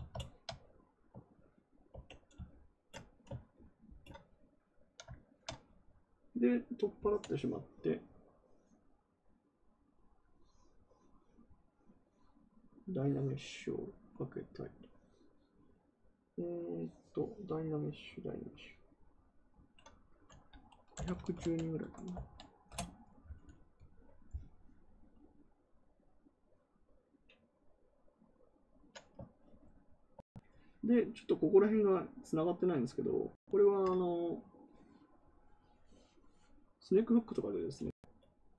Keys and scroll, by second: 1.8 ctrl+w, 20.6-22.0 typing, 22.6 Return.